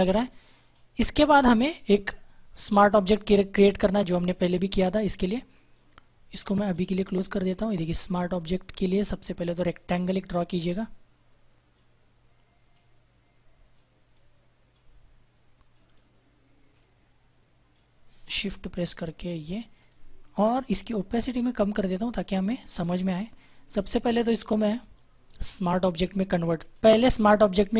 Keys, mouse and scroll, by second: 4.5 -, 6.5 click, 10.5 click, 20.3 Return, 21.6 click, 25.2 right click.